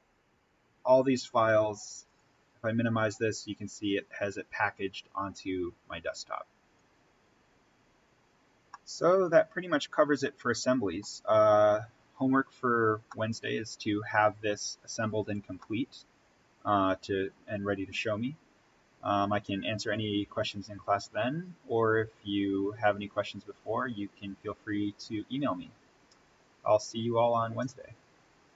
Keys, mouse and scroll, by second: 2.0 click, 8.6-11.1 middle drag, 11.1-11.5 scroll down 1, 13.0 middle click, 13.4-14.3 scroll down 1, 15.4 scroll up 1, 15.6-27.8 middle drag, 28.4 click.